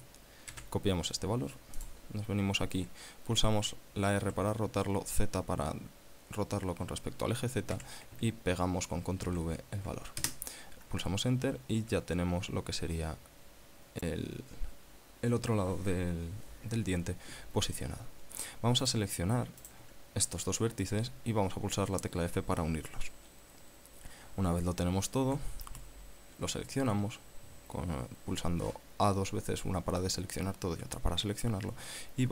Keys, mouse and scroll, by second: 0.8 ctrl+c, 2.2 click, 4.5 r, 8.0 z, 9.5 ctrl+v, 10.5 KP_Enter, 19.1 right click, 19.9 shift+right click, 22.6 f, 25.5 a, 26.0 a.